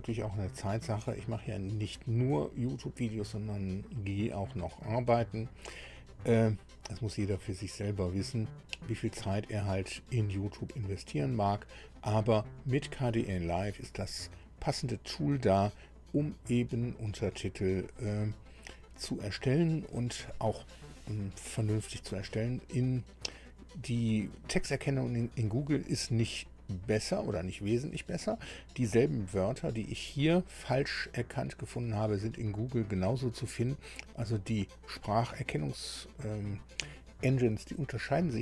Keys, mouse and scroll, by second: 7.4-9.2 drag, 9.6-9.9 scroll up 2.